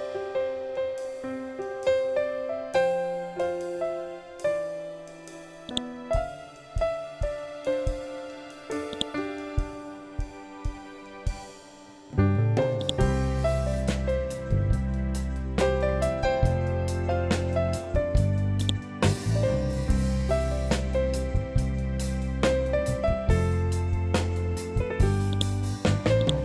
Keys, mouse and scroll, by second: 0.9 scroll down 1, 5.1-8.4 drag, 8.4-11.7 ctrl+drag, 12.3 click, 15.5 Return, 18.0 click, 21.6 Return, 24.8 click.